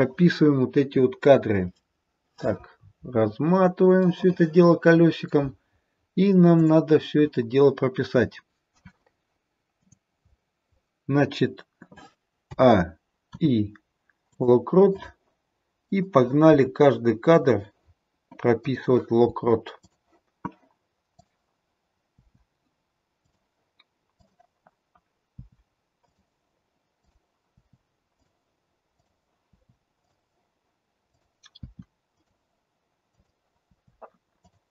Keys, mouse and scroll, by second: 2.8-4.1 scroll up 16, 4.1 middle click, 6.5 click, 12.5 click, 12.5 a, 13.3 i, 15.9 click, 16.4 i, 18.5 click, 19.1 i, 21.1 click, 22.1 i, 24.3 click, 25.3 i, 27.0 click, 27.4 i, 29.0 click, 29.4 i, 31.0 click, 31.4 i, 33.1 click, 33.6 i.